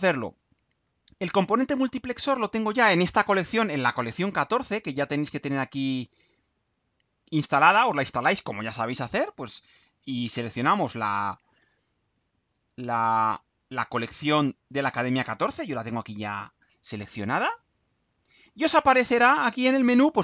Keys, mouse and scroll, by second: 6.1 click, 16.0 click, 17.1-18.9 drag.